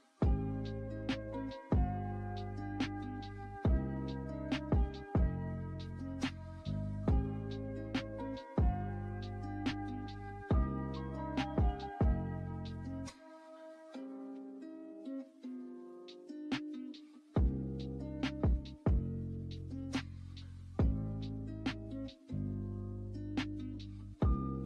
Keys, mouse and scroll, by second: 2.4 ctrl+g, 3.4 click, 3.7 right click, 6.0-20.0 drag, 20.0 right click, 20.7-23.8 drag.